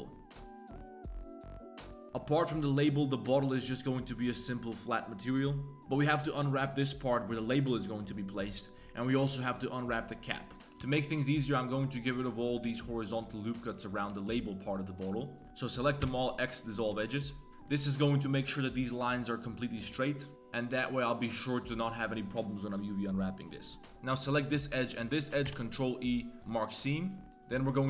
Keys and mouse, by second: 7.1 middle click, 7.9 middle click, 10.3 middle click, 10.6 ctrl+z, 10.6 2, 10.6 1, 10.8 b, 11.5 b, 12.6 b, 13.7 middle click, 14.1 b, 14.8 middle click, 15.1 b, 16.0 x, 16.9 z, 17.4 3, 17.5 click, 20.3 g, 21.0 3, 23.9 2, 24.9 alt+shift+click, 25.5 ctrl+e, 26.9 middle click, 27.3 3, 27.5 2, 27.5 click.